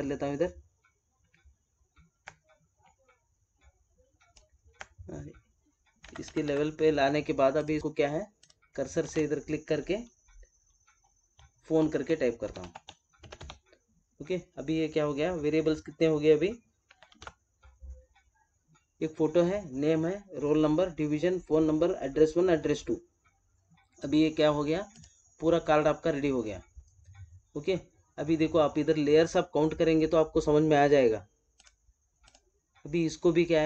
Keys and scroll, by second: 9.0 ctrl+a, 17.0 ctrl+-.